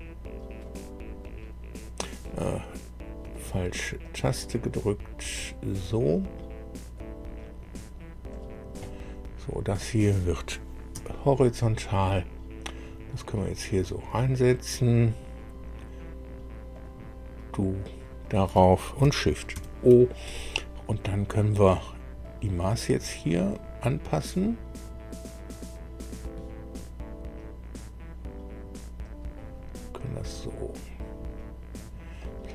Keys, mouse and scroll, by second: 0.6 click, 1.2 right click, 3.2 click, 4.0 click, 6.9 click, 8.3 click, 8.8 right click, 9.8 click, 10.9 h, 12.6-15.1 drag, 15.3-15.7 scroll up 2, 16.7 click, 17.7 click, 19.5 shift+o, 20.9 scroll down 2, 22.8-24.5 drag, 29.0-31.9 drag, 32.1-32.5 middle drag.